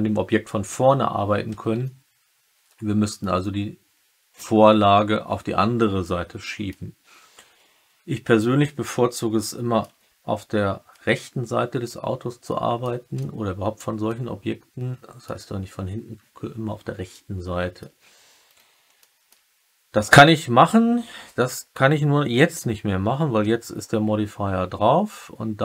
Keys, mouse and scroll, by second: 1.7-3.1 alt+middle drag, 5.9 alt+middle click, 9.3 alt+click, 12.4 alt+click, 13.1 click, 14.0-15.2 alt+drag, 17.0 alt+click, 17.2 alt+middle click, 18.9 alt+middle click.